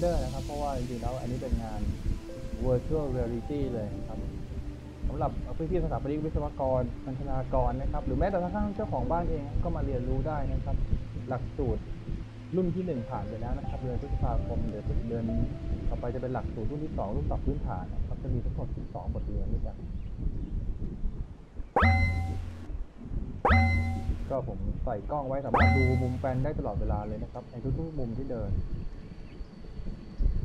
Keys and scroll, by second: 4.5 a, 9.0 w, 14.5 a, 21.7-23.4 typing, 25.6 e, 29.0 w, 29.3 a, 30.2 w.